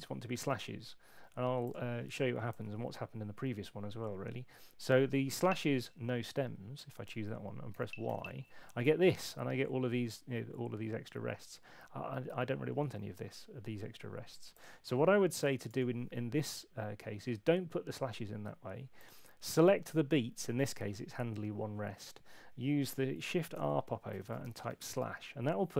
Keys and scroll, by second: 2.5 Return, 5.3 Up, 7.7 y, 15.6 BackSpace, 23.5 shift+r, 24.4 h.